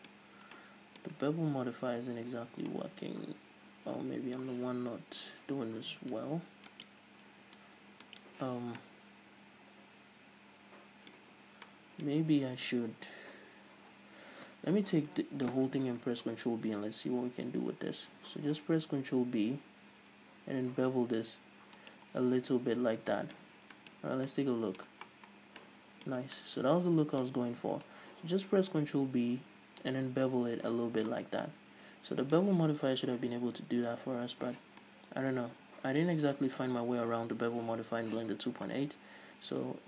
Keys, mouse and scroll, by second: 0.2-0.6 scroll up 2, 6.2 click, 6.9 right click, 7.7 click, 8.3 right click, 8.7 scroll down 1, 8.8-16.3 middle drag, 11.4 Tab, 14.6 a, 15.1-15.6 scroll up 1, 16.3 ctrl+b, 22.7 shift+click, 23.2 shift+middle click, 23.4-23.8 scroll up 2, 23.8-24.7 middle drag, 24.7 Tab, 25.2-25.7 scroll down 2, 25.7-26.3 middle drag, 26.3 scroll down 2, 26.4-39.8 middle drag, 27.3-27.9 scroll up 2, 31.3 scroll down 2, 38.3-38.7 scroll up 2.